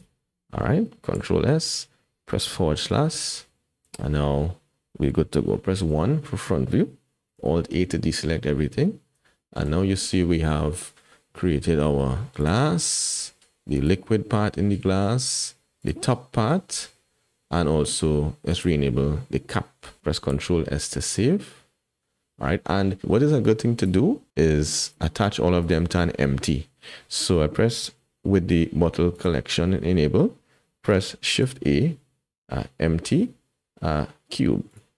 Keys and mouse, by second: 0.0 Tab, 1.2 ctrl+s, 2.9 /, 3.5-4.4 drag, 5.8 KP_1, 7.5 alt+a, 9.4 shift+click, 12.4-18.6 drag, 20.3 ctrl+s, 21.2-22.9 drag, 23.8 click, 24.9 click, 29.1 click, 30.9 shift+middle click, 31.3 shift+a.